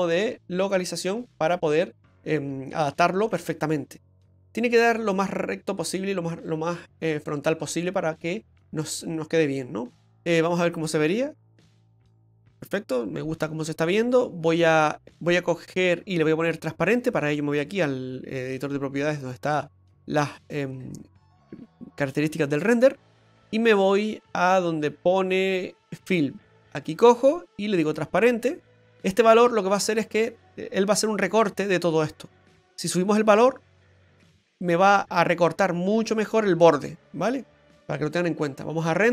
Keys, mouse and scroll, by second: 1.4 click, 3.8 click, 9.0 click, 11.6 click, 17.6 click, 26.1 click, 26.4-27.9 scroll down 6, 27.9 click, 33.4 click.